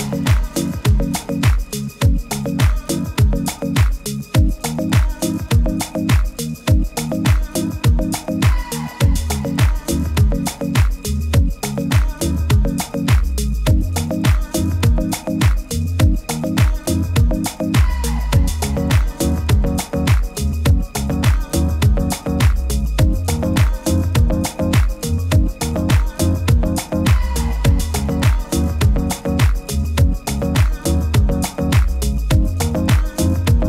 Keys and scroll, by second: 3.5 super+-, 3.7 super+-, 8.3 super+t, 21.4 super+-, 21.6 super+-, 22.0 super++, 22.7 super+s, 29.3 super+-, 29.5 super+-, 29.8 super++, 30.0 super++.